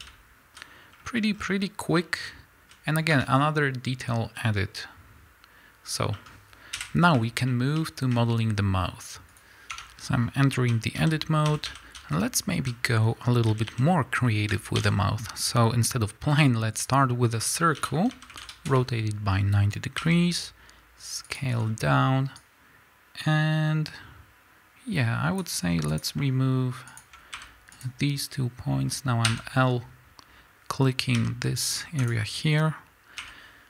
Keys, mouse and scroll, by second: 0.6 z, 0.9-1.3 scroll down 1, 2.0-9.9 middle drag, 2.2 z, 2.9 scroll down 1, 3.1 Tab, 6.7 KP_1, 9.4 click, 9.9 Tab, 10.2 scroll up 2, 10.5 a, 12.6 z, 13.4 a, 16.8 shift+a, 17.8 r, 18.7 KP_Enter, 19.3-20.0 scroll down 2, 20.0 s, 21.5-22.4 scroll up 2, 22.4-26.0 drag, 27.0 shift+click, 27.8 x, 29.2 l, 32.1 x, 33.2 l.